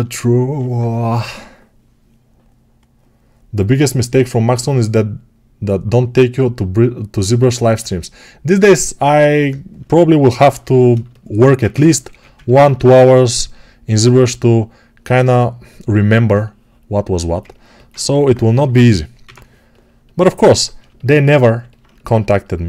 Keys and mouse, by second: 11.9 1, 17.7-22.6 alt+right drag, 18.0 g, 19.1 6.